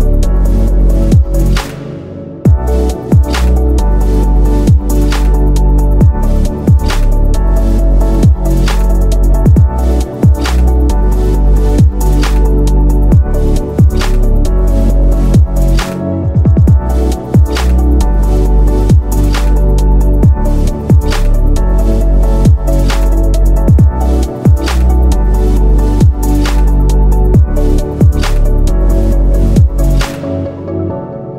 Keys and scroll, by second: 21.4 ctrl+z.